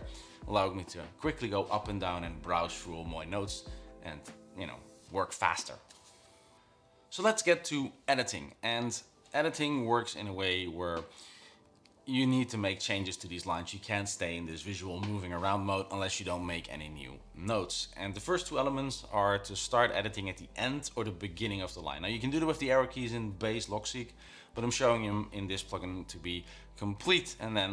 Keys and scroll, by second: 11.5-12.0 typing, 27.1-27.7 typing.